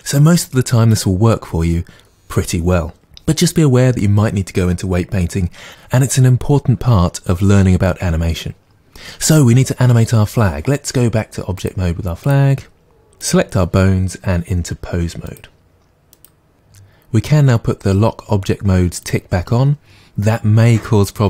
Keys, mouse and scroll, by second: 11.6-21.2 drag.